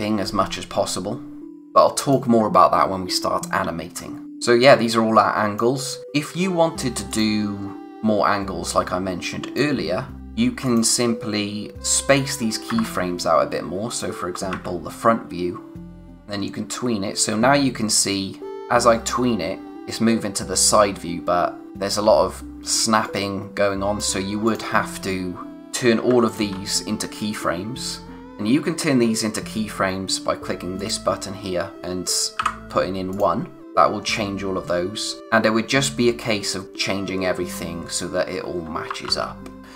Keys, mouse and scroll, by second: 1.5 click, 12.7 ctrl+c, 13.9 click, 16.0 click, 26.3 shift+click, 30.8 click, 33.1 click, 34.1 click, 38.9 ctrl+Num_Lock, 39.0 ctrl+z, 39.6-39.7 scroll up 1.